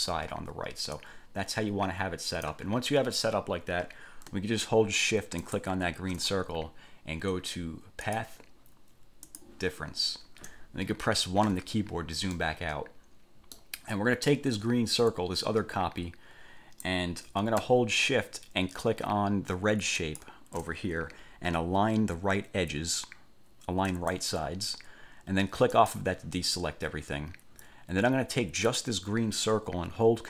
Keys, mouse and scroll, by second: 1.1 click, 5.6 shift+click, 8.3 click, 9.5 click, 11.7 1, 12.5-13.9 middle drag, 14.7-17.2 drag, 20.1 shift+click, 24.1 click, 25.9 click, 28.9 click.